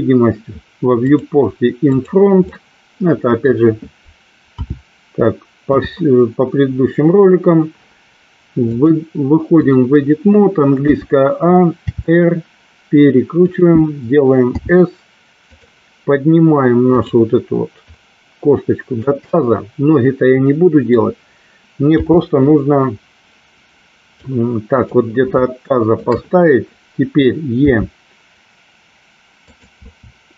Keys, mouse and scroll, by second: 1.2 click, 1.9 click, 2.8-3.7 middle drag, 4.7 KP_7, 5.8 KP_3, 8.9-9.8 drag, 10.9 a, 11.9 r, 13.5 click, 14.7 s, 17.0 click, 18.0-19.2 drag, 19.4-21.2 middle drag, 22.0 KP_7, 24.4 click, 25.6 shift+middle click, 25.6 shift+scroll up 1, 27.8 e, 29.7 click, 29.9 e.